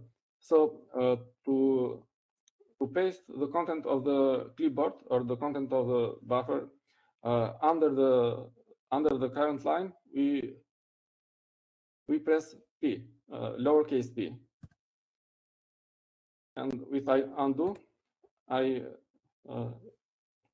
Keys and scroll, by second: 11.8 Down, 17.4 p, 20.3 u.